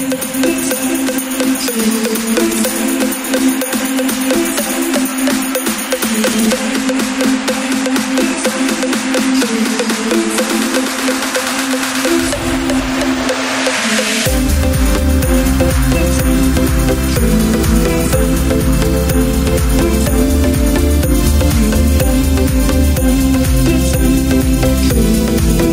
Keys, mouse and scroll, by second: 7.0 click, 7.7 shift+d, 14.5 Up, 15.1 Left, 15.9 Up, 16.5 click, 17.3-20.2 drag, 24.3 click, 25.4-25.7 drag.